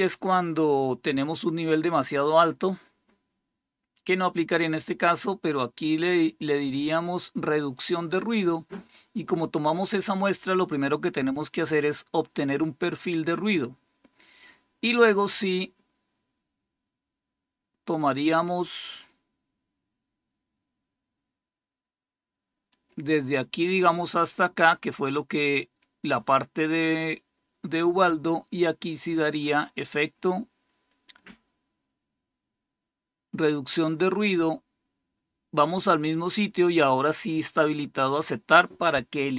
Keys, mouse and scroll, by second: 7.7 click, 12.4 click, 14.8 click, 22.6-27.0 drag, 28.5 click, 34.2 click, 38.0 click.